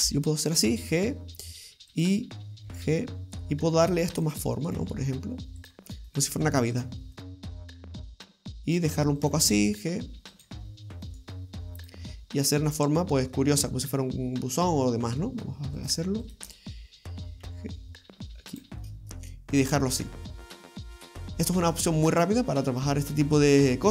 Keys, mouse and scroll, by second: 0.0 g, 0.9 middle click, 1.9 right click, 2.7 g, 4.6 right click, 4.7 g, 6.1 right click, 6.3 g, 7.2 right click, 7.3 g, 8.1 middle click, 9.2 right click, 9.4 g, 11.1 right click, 11.8 click, 12.2 middle click, 15.8 right click, 16.3 shift+right click, 17.4 g, 18.8 middle click, 21.3 scroll up 1, 21.5-22.0 scroll down 3, 22.0 middle click, 23.2-23.9 scroll up 2.